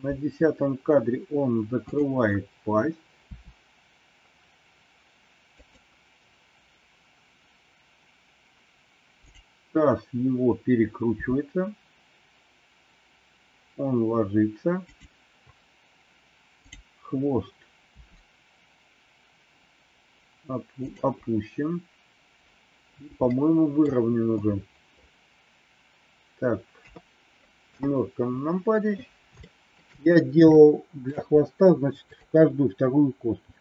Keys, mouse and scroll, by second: 1.8 click, 3.3 r, 11.1 r, 17.9 r, 23.3 middle click, 26.8 KP_3, 27.5 KP_7, 29.4 shift+middle click, 30.5 shift+middle click, 32.0 click.